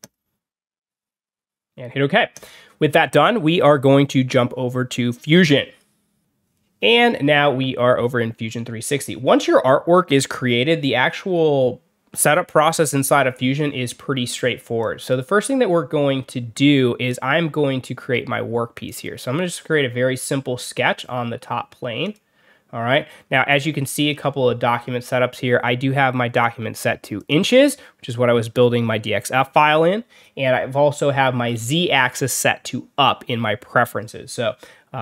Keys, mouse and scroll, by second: 2.2 click, 14.7 click, 18.8 click, 20.1 click, 21.9 click, 23.1 scroll up 2, 23.7-24.0 scroll down 2, 24.0-24.7 scroll up 4, 24.7-25.4 scroll down 3, 26.3 click, 27.1 click.